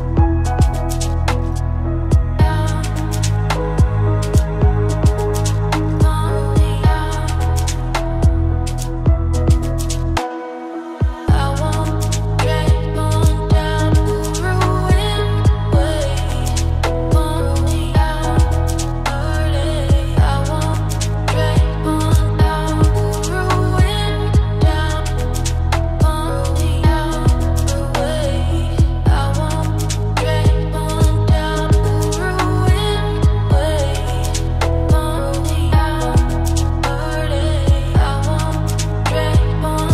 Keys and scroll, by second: 21.6 ctrl+space, 24.8 ctrl+z.